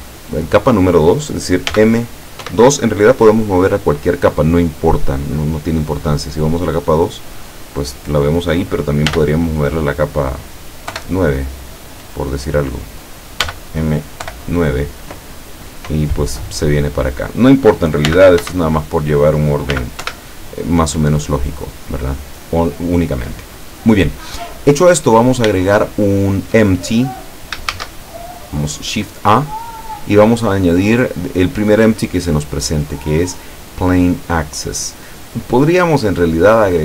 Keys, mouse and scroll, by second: 1.8 m, 2.5 2, 7.0 click, 9.1 m, 11.0 9, 13.5 m, 14.3 9, 17.1 click, 18.1 m, 18.5 2, 19.8 m, 20.1 2, 21.3 click, 22.9 right click, 25.8-26.7 shift+middle drag, 27.7 shift+a.